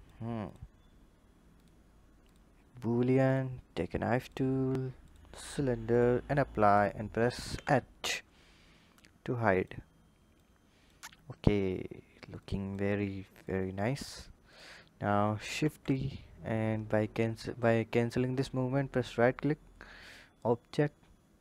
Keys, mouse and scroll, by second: 0.2 click, 1.3-4.1 drag, 5.7-6.5 drag, 7.2 h, 7.8-9.0 scroll down 3, 9.0 click, 10.2 click, 10.9-12.2 scroll down 4, 12.2 click, 13.2-14.3 drag, 15.3 shift+d, 19.7-21.4 drag.